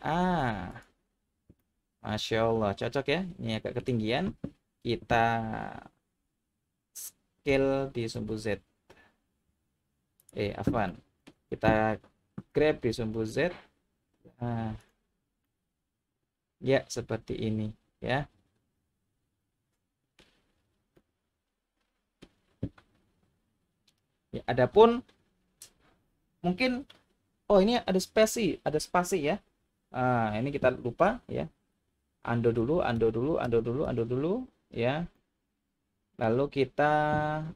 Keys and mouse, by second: 0.7 click, 1.7-3.8 middle drag, 7.5 s, 10.9 middle click, 12.5 g, 12.9 z, 14.8 click, 15.6-20.2 middle drag, 20.9-22.2 middle drag, 32.6 ctrl+z, 32.9 ctrl+z, 33.4 ctrl+z, 33.8 ctrl+z, 35.2-36.2 middle drag.